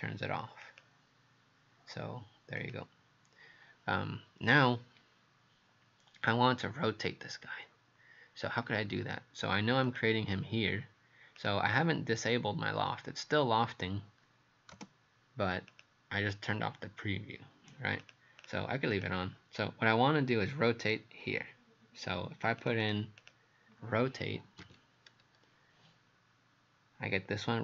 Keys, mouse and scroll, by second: 0.7 click, 15.7 click, 18.4 click, 19.0 click, 22.6 click, 22.8 click, 24.2-25.3 typing.